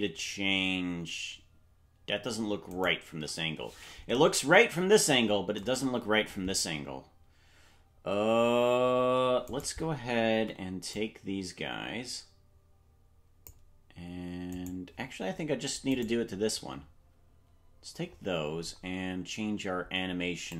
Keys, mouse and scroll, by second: 3.0 shift+right click, 5.6 KP_0, 9.4 right click, 10.3 c, 16.0 right click.